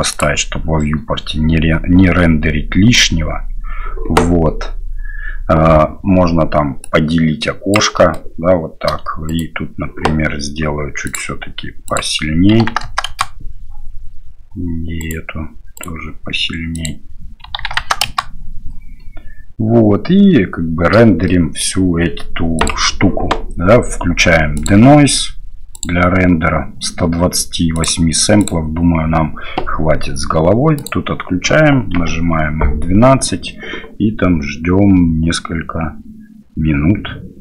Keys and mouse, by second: 0.1 click, 6.8 click, 7.9 middle drag, 9.2 right click, 11.0 click, 11.9-13.5 drag, 12.8 KP_0, 15.0 right click, 15.7 right click, 16.7-18.6 drag, 21.3 shift+middle click, 22.5 click, 24.5 click, 25.7 click, 27.8-29.0 drag.